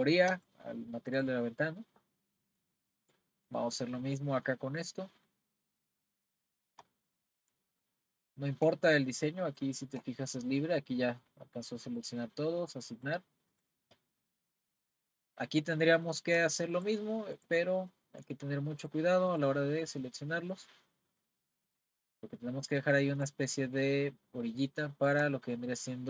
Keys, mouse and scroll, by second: 0.3 click, 2.1-2.8 scroll down 1, 2.8-4.5 shift+middle drag, 4.5-4.8 scroll up 1, 5.3 middle click, 5.9 scroll down 1, 7.1-7.4 scroll up 1, 7.7 shift+click, 9.5 shift+click, 12.0 click, 12.9 click, 14.2-15.8 middle drag, 15.8-16.7 scroll up 2, 16.7 shift+click, 17.4 shift+click, 18.8 shift+click, 19.3 shift+click, 19.8 shift+click, 20.4 shift+click, 21.1 shift+click, 21.7 shift+click, 25.7 shift+click.